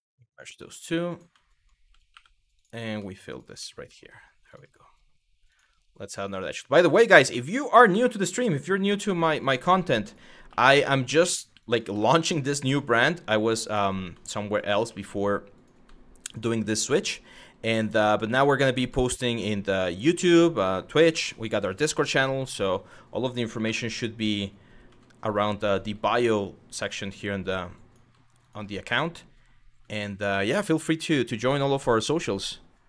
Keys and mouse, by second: 1.7 2, 2.2 click, 2.9 shift+click, 3.2 f, 3.6 shift+middle click, 4.1 click, 5.1 click, 5.8 click, 6.6 click, 6.9 shift+middle click, 7.5 2, 8.6 w, 9.0 click, 9.7 shift+click, 10.1 f, 10.7 click, 11.7 middle click, 12.3 f, 12.7 middle click, 15.2 click, 17.3 click, 17.9 f, 18.5 click, 19.0 shift+f, 19.6 shift+click, 19.8 shift+f, 20.8 f, 21.3 click, 23.3 1, 23.7 click, 24.5 g, 24.9 click, 25.2 click, 25.4 g, 25.7 click, 26.1 click, 26.6 g, 27.0 click, 27.5 click, 27.6 g, 28.0 click, 29.4 Tab.